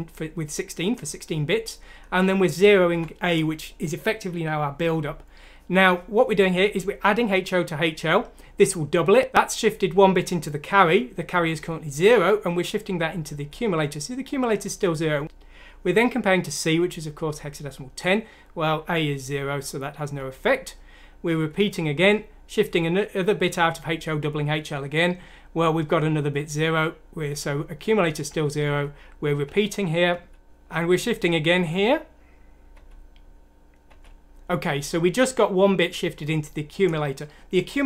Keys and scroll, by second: 2.9 F7, 13.2 F7, 19.3 F7, 20.1 F7, 21.3 F7, 26.3 F7, 28.2 F7, 28.6 F7, 29.4 F7, 30.3 F7, 31.7 F7.